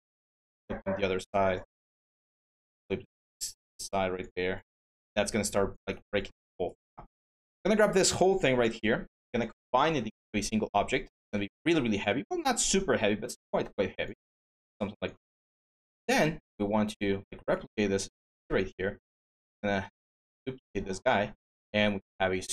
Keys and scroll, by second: 15.4 ctrl+d.